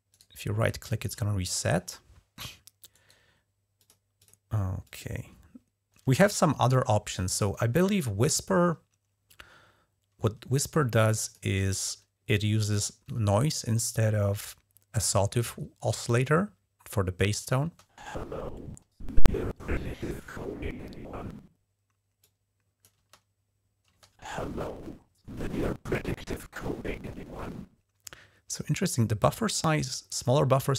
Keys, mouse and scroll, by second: 0.0 click, 0.0-1.0 right drag, 2.8 right click, 3.6 click, 4.0 drag, 4.7 click, 11.1 click, 17.5 space, 22.1-22.7 drag, 22.8 space, 23.7 space, 29.1-30.1 drag.